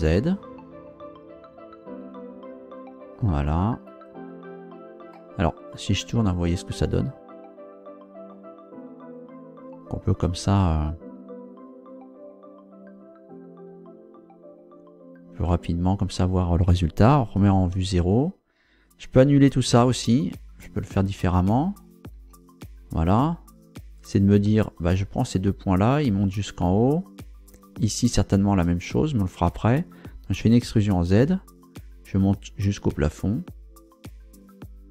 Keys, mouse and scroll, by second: 3.9 click, 5.1-8.5 middle drag, 8.6-9.0 scroll up 2, 9.3 scroll down 2, 15.5-16.6 middle drag, 17.3 KP_0, 19.6 ctrl+z, 22.1 ctrl+z, 24.0 right click, 24.7 shift+right click, 30.4 e, 30.8 z.